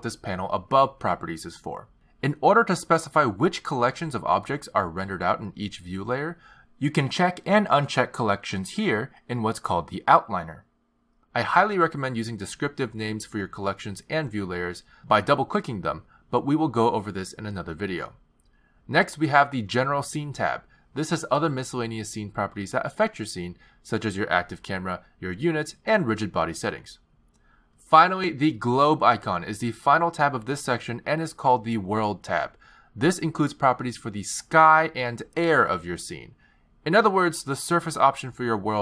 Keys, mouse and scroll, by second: 5.2 click, 7.2 click, 8.0 click, 9.0 click, 10.7 click, 11.8 click, 13.1 click, 13.3 click, 19.8 click, 21.6 click, 25.4 click, 25.7 click, 27.5 click, 28.1 click, 30.3 click.